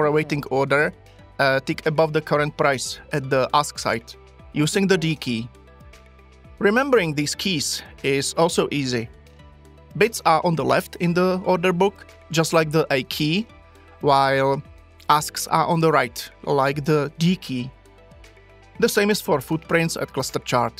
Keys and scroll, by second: 4.7 d.